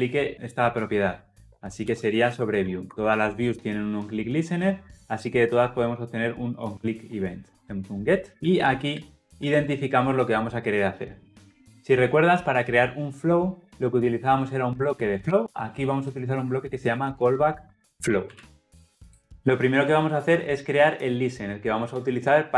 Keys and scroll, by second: 2.8 Escape, 7.6 Tab, 9.5 Return.